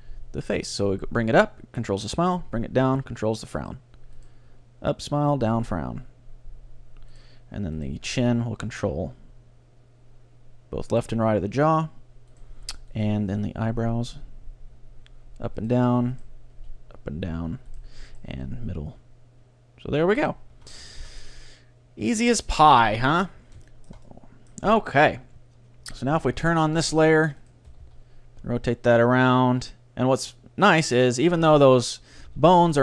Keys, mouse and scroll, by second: 0.0-1.4 right drag, 0.1 g, 3.7-6.1 right drag, 4.6 g, 7.2-9.6 right drag, 8.1 g, 12.4-14.8 right drag, 13.2 g, 15.7-20.0 right drag, 16.6 g, 18.4 g, 20.3-22.2 right drag, 20.6 a, 21.0 ctrl+d, 21.0 ctrl+s, 22.8-24.6 drag, 23.4-26.4 middle drag, 26.4-28.4 drag, 26.9-28.7 middle drag, 27.5-29.4 right drag, 27.8 r, 31.4-32.8 right drag, 32.2 r.